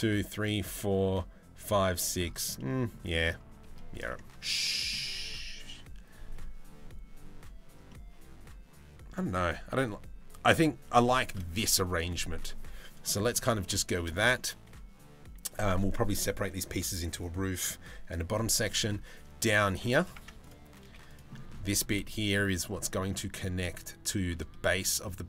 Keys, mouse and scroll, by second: 2.1 middle click, 2.7 shift+middle click, 3.7 middle click, 7.5-8.7 middle drag, 10.0 middle click, 10.8 shift+middle click, 11.3 middle click, 12.7 middle click, 13.0 middle click, 13.5 shift+middle click, 18.3 middle click, 19.0 z, 19.7 Tab, 20.4 z, 20.9 middle click, 21.6 middle click, 22.5 shift+middle click, 24.6-25.0 middle drag, 25.2 Tab.